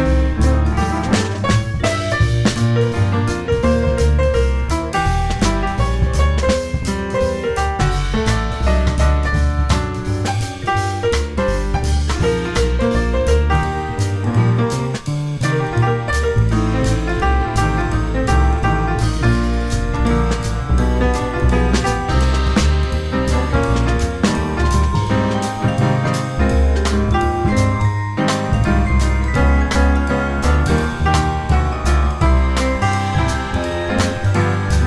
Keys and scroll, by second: 0.8 F4, 1.8 F4, 4.9 space, 6.2 r, 8.2 w, 9.5 r, 10.4 w, 11.6 F4, 13.2 F4, 15.8 F4, 16.5 F4, 17.4 F4, 20.8 space, 21.2 r, 22.0 w, 24.1 r, 26.7 w, 28.1 r, 29.4 w, 30.4 F4.